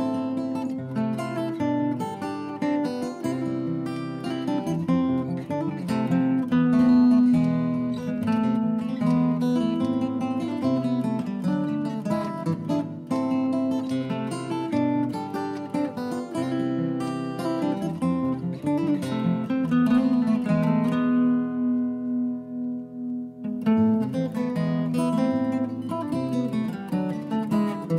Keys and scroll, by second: 1.8 Up, 1.9-3.3 Up, 5.6-6.8 typing, 6.8 Return, 16.8 Delete, 19.5 Delete.